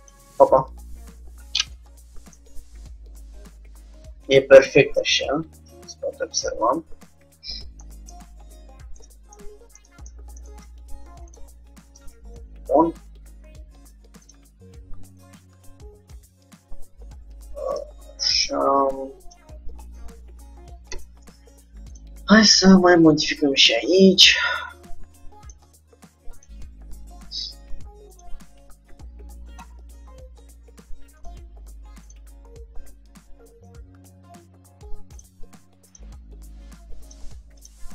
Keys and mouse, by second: 2.4-4.7 middle drag, 8.2-11.4 middle drag, 11.4-13.0 drag, 12.0 shift+d, 14.7 r, 18.1 g, 20.0-22.0 middle drag, 21.0 Tab, 22.0-23.7 drag, 23.0 g, 24.2-25.9 drag, 24.5 g, 26.5-28.1 drag, 28.2-29.9 drag, 32.1-33.6 drag, 33.6 g, 36.1-37.9 drag, 36.3 g, 37.8 g.